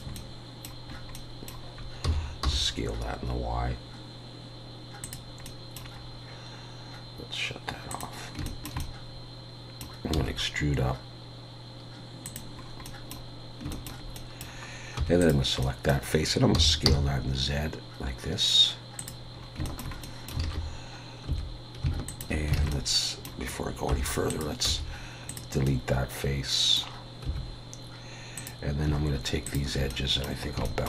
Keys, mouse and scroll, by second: 0.1 middle click, 0.9-1.3 scroll up 2, 1.1 middle click, 2.0 s, 5.4 middle click, 6.0 scroll up 1, 7.9 click, 7.9-8.4 scroll up 1, 8.4 shift+middle click, 8.8 middle click, 10.1 e, 12.6-13.1 scroll up 3, 12.9 middle click, 13.7 shift+middle click, 14.2 middle click, 15.0 3, 15.2 click, 15.6 middle click, 16.5 s, 19.4 scroll up 2, 19.7 shift+middle click, 20.0 middle click, 20.4 alt+a, 21.3 2, 22.1 alt+shift+click, 22.6 alt+a, 22.7 middle click, 23.9 3, 24.3 click, 24.7 x, 25.7 middle click, 27.3 2, 28.4 click, 29.5 shift+click, 29.9 middle click, 30.5 scroll up 1, 30.7 shift+middle click.